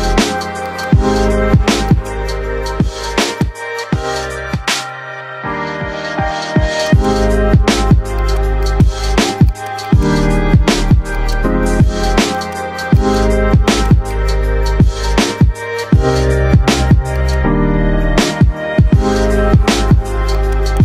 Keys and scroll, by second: 1.0 c, 8.9 shift+F2, 9.2 Escape, 14.6 ctrl+q.